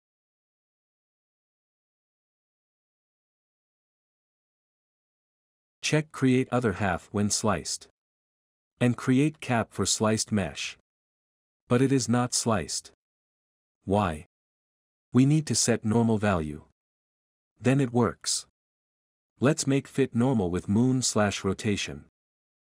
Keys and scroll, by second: 0.0-1.2 typing, 2.4-4.2 typing, 12.2-19.9 typing.